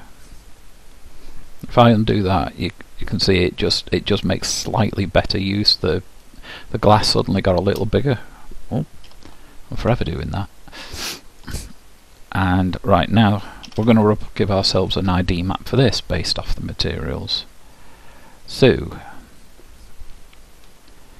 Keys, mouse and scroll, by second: 0.4-2.9 middle drag, 2.2 ctrl+z, 4.6-6.4 drag, 7.2-9.1 middle drag, 9.1 ctrl+z, 10.3-12.2 middle drag, 13.6 a, 14.9-17.3 middle drag, 18.4-21.1 middle drag.